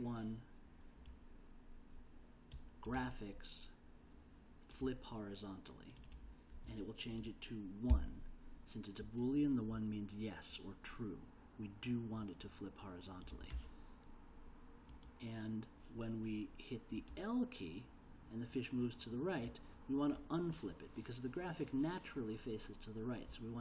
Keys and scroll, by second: 7.9 1.